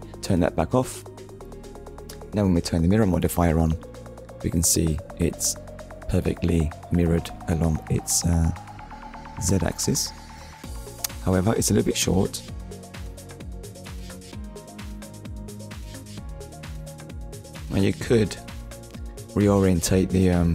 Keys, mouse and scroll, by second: 0.3 click, 2.7 click, 3.7 shift+middle click, 8.3-8.7 scroll up 1, 11.9 click, 12.9 click, 14.8 click, 15.5 click, 17.2 click, 18.0 click, 20.1 shift+middle click.